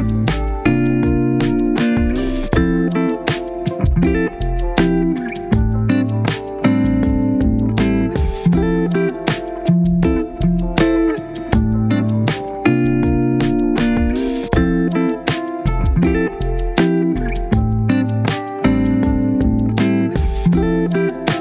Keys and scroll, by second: 6.5 0.